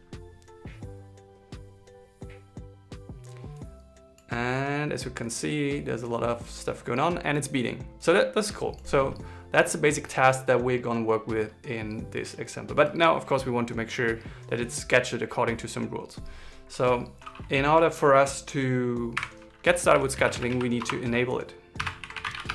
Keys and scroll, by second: 22.1 alt+l, 22.3 shift+e.